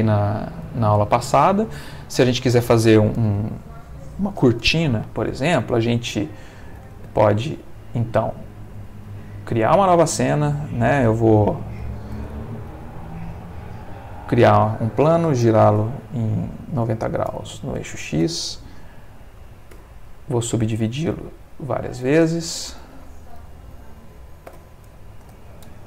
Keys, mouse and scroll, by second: 7.5 click, 8.0 click, 8.6 click, 9.6 click, 11.0 x, 11.3 click, 12.1 shift+a, 13.8 click, 15.4 r, 15.7 9, 15.8 0, 17.3 x, 17.8 Return, 19.7 Tab, 20.1 right click, 20.7 click, 22.0 click, 22.8 click, 24.5 3, 24.5 0, 25.2 Return.